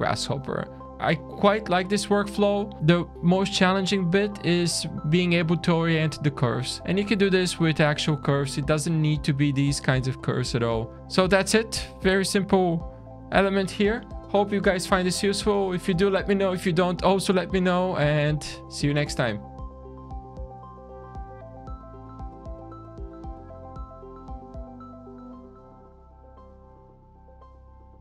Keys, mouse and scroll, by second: 0.8 middle click, 0.8 scroll down 1, 2.1 Tab, 2.8 alt+a, 2.8 alt+click, 3.1 scroll down 2, 10.3 middle click, 11.0 middle click, 11.0 scroll down 3, 11.6 middle click.